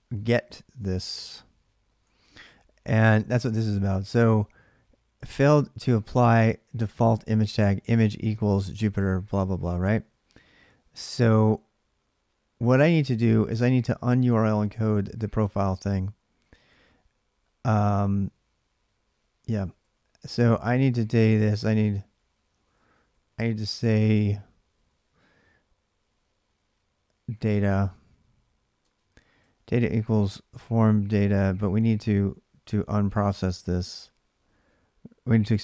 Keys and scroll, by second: 2.0 alt+Tab, 12.6 alt+Tab, 15.7 ctrl+[, 15.8 typing, 17.8-24.4 typing, 26.8-30.8 typing, 29.2 ctrl+[.